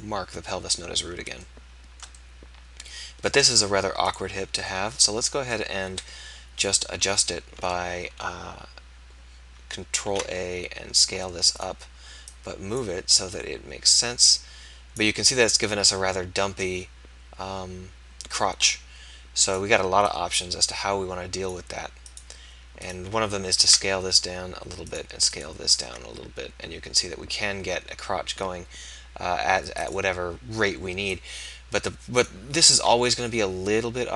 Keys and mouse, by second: 5.9 KP_1, 10.1 ctrl+a, 22.1-23.6 right drag, 23.6 ctrl+a, 25.8 ctrl+a, 29.9-32.8 right drag, 32.8 ctrl+a.